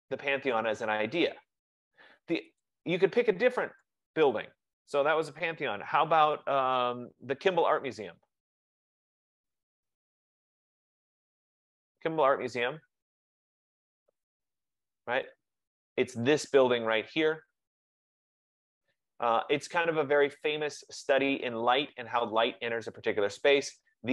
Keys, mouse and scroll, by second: 2.7 click, 3.9 click, 8.1-10.7 typing, 8.7 click, 16.6 click, 16.6-17.1 scroll down 1, 23.9 click.